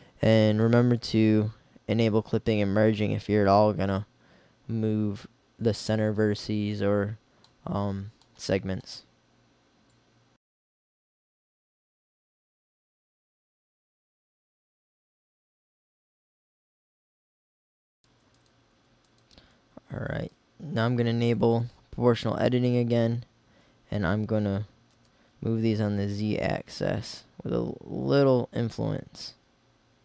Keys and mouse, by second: 10.0 middle click, 11.2-12.8 middle drag, 12.9 click, 13.7 middle click, 15.6 middle click, 17.6-20.1 middle drag, 23.8 g.